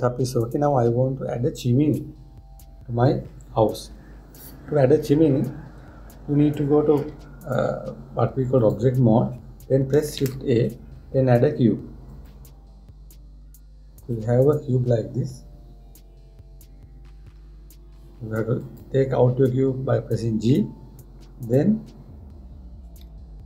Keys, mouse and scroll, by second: 7.8 Tab, 9.2 click, 10.8 shift+a, 18.0 g, 21.1-23.4 middle drag.